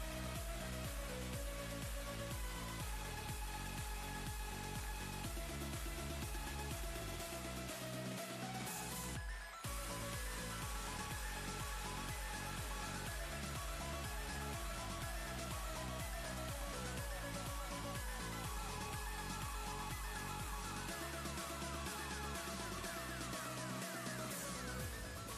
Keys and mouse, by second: 0.1 ctrl+d, 0.7 ctrl+space, 0.8-1.7 ctrl+click, 1.2 ctrl+space, 1.8 click, 2.5 ctrl+click, 3.0-3.7 ctrl+space, 5.4-6.8 drag, 9.9 ctrl+space, 10.0-11.7 ctrl+click, 10.6 ctrl+space, 10.9 click, 11.3 space, 13.2-13.8 drag, 16.9 space, 17.1-18.0 click, 17.4 space, 21.8 click, 24.4 click.